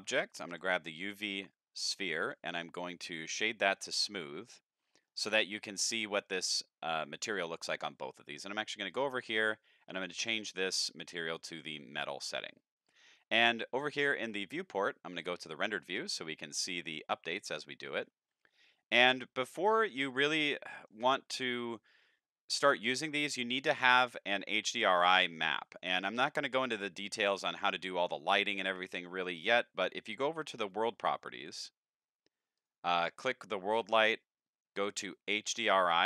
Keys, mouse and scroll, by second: 0.5 g, 1.8 click, 2.2 right click, 3.1 click, 3.6 shift+middle click, 4.1 middle click, 4.6 scroll up 1, 4.9 shift+middle click, 7.2 middle click, 8.9 click, 11.3 click, 13.9 shift+middle click, 14.5 z, 15.2 click, 17.8 middle click, 18.6-19.0 scroll up 4, 19.5 middle click, 20.4 middle drag, 20.5 scroll down 1, 20.7 middle click, 23.2 click, 24.0 middle click, 24.4-24.9 scroll down 2, 30.7 click, 31.3 click, 32.6 click, 33.0 click.